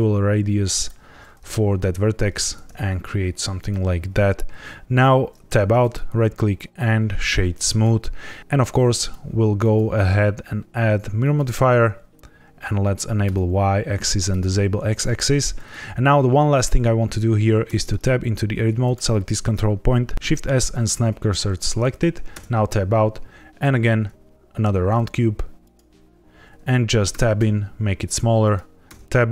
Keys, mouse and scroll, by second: 0.7 click, 2.3 alt+s, 3.5 click, 5.4 Tab, 5.7 right click, 8.8 click, 9.5 click, 13.2 click, 14.2 click, 17.6 Tab, 18.8 click, 20.1 shift+s, 20.3 shift+s, 22.3 Tab, 23.8 shift+a, 27.0 Tab, 27.3 s, 28.4 click, 28.8 Tab, 29.2 right click.